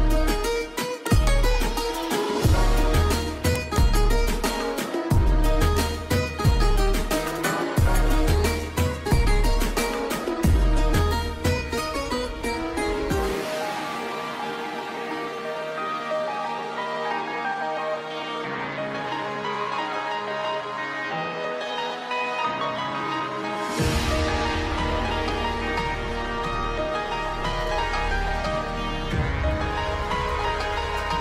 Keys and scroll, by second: 1.5 F3, 4.4 shift+F2, 11.4 5, 11.4 Return, 18.1 6, 18.3 Return, 26.7 space, 26.9 Escape.